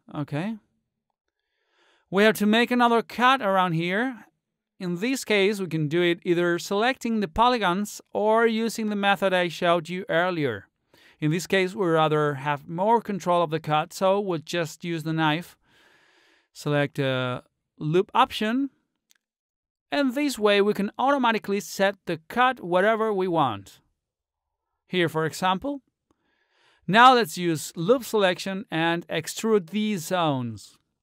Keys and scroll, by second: 23.6 ctrl+z.